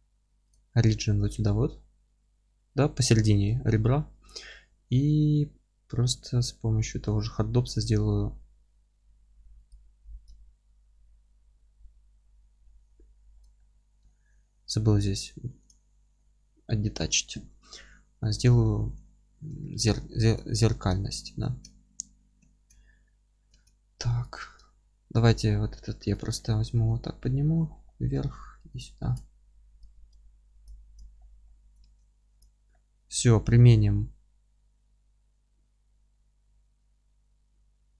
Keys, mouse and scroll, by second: 4.2-4.5 scroll up 1, 5.6 alt+x, 9.5-10.3 drag, 10.3-15.6 alt+middle drag, 12.2 alt+q, 13.8 scroll up 1, 15.6 click, 16.0-24.2 middle drag, 19.8 scroll up 1, 21.7 alt+z, 23.5 Tab, 23.9 3, 24.2 click, 24.6-26.1 alt+middle drag, 25.8 1, 26.1 click, 26.3-28.7 middle drag, 26.7 g, 28.7 ctrl+click, 29.7 g, 30.6 ctrl+click, 31.2-32.4 alt+middle drag, 31.8 Tab, 32.4 click, 32.7-37.9 middle drag.